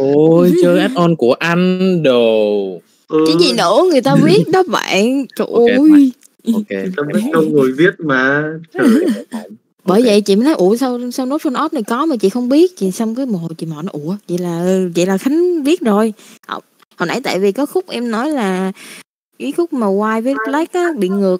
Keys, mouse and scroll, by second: 2.9 click, 3.3 n, 10.5 click, 11.5 click, 11.9 n, 13.0 click, 13.9 middle click, 14.7 click, 15.2-16.2 drag, 17.1 middle click, 17.7 click, 18.5 click.